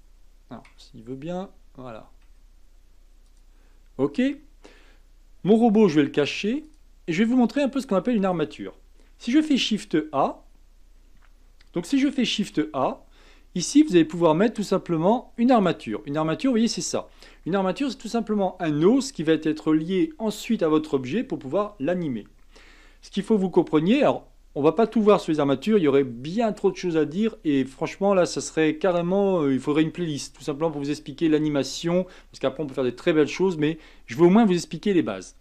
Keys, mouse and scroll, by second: 6.6 click, 7.3-10.3 middle drag, 10.9 shift+a, 12.3 shift+a, 16.2-19.3 middle drag, 24.1-28.4 middle drag.